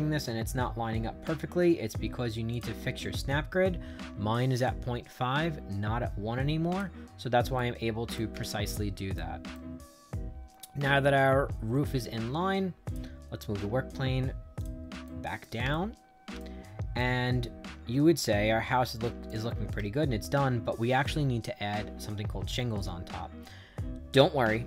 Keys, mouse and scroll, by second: 2.4 click, 6.6 click, 7.5 right click, 8.4 shift+right click, 9.4-11.7 right drag, 12.8 click, 14.5 click, 15.0 right click, 15.6 shift+right click, 16.9-19.2 right drag, 19.7 shift+right click.